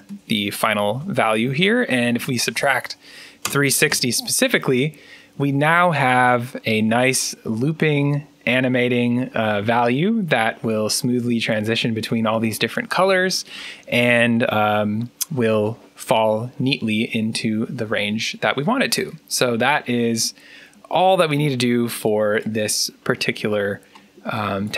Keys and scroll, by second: 1.6-2.6 typing, 3.3 Return, 5.3-6.0 typing, 8.7-9.4 typing.